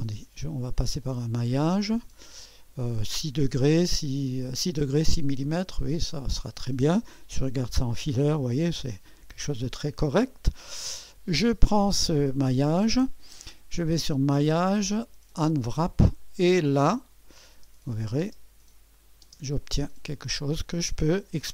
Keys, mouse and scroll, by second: 0.4-2.9 drag, 6.0 click, 7.4 2, 8.7 click, 9.9 typing, 10.7 click, 12.4 click, 14.0 click, 15.3 click, 16.3-17.7 drag, 18.2-19.5 typing, 18.9 click, 20.1-21.2 drag, 20.8-21.5 typing.